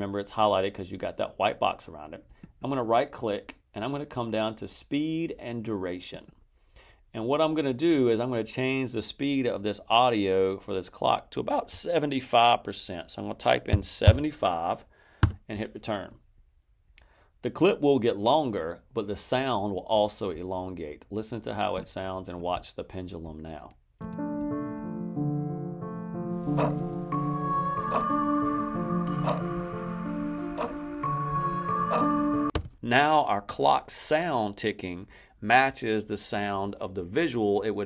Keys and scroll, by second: 13.6 7, 13.9 5, 15.1 Return, 23.9 space, 32.4 space.